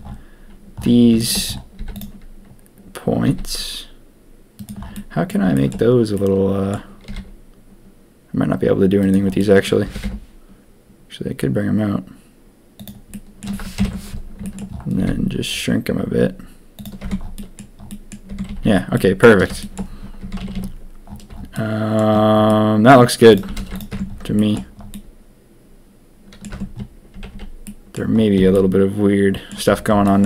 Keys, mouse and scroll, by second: 1.1 shift+middle click, 1.7 z, 3.2 s, 4.9 middle click, 5.5 shift+middle click, 6.1 click, 7.0 s, 9.3 click, 9.8 g, 13.1 middle click, 13.7 ctrl+KP_3, 14.4 shift+middle click, 14.9 s, 17.0 Tab, 17.3 click, 17.8 click, 18.3 Tab, 18.4 a, 18.6 a, 18.9 click, 19.5 shift+click, 20.2 Tab, 20.3 a, 20.5 a, 21.5 click, 22.4-22.8 drag, 23.3 click, 23.5 ctrl+a, 23.9 Tab, 24.3 shift+middle click, 24.9-26.4 middle drag, 26.5 Tab, 27.1 a, 27.3 a, 27.6 middle drag, 28.5-29.4 middle drag, 30.0 middle drag.